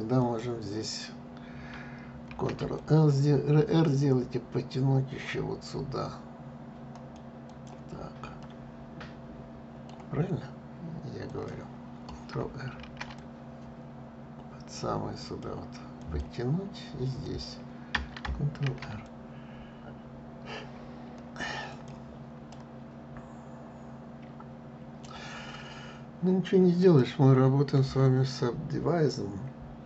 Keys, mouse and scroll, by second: 2.0 ctrl+r, 8.1-11.0 middle drag, 11.0 click, 12.4 ctrl+r, 15.7 click, 16.9 click, 18.3 ctrl+r, 22.2-24.7 middle drag, 26.5 click.